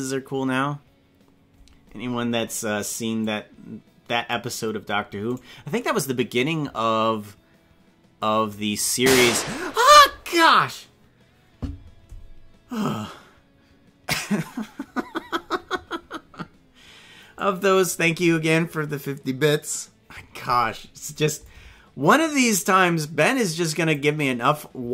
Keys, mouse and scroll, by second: 3.2-4.4 drag, 5.3 right click, 17.3 click, 21.4-24.0 drag.